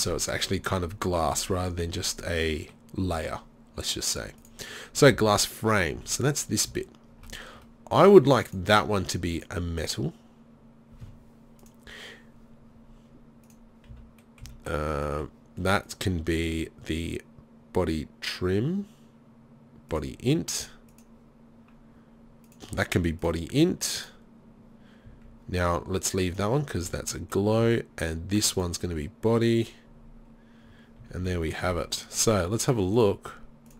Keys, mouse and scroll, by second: 5.1-6.4 drag, 5.2 z, 6.0 z, 6.7 z, 13.5 right click, 13.9 z, 14.5 z, 20.9-27.5 drag, 25.1 z, 26.9 z, 27.6 z, 31.1 z, 31.3 z, 33.0 click.